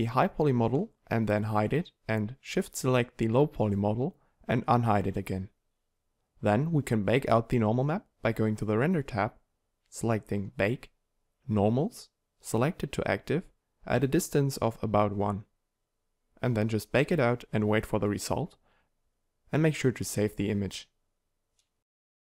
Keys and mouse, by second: 1.5 h, 3.8 alt+h.